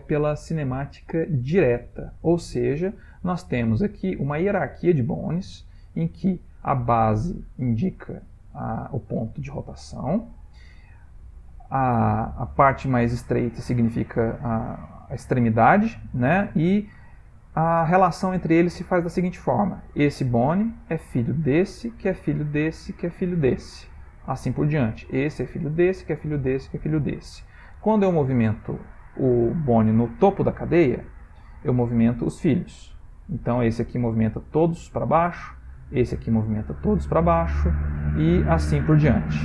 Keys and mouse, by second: 0.4 shift+middle click, 3.9 shift+middle click, 9.2 r, 15.3 shift+middle click, 17.8 click, 20.3 click, 21.5 click, 22.4 click, 23.3 click, 25.0 click, 25.7 click, 26.3 click, 27.0 click, 28.0 click, 31.9 r, 35.7 click, 36.2 r, 37.9 click, 38.1 r.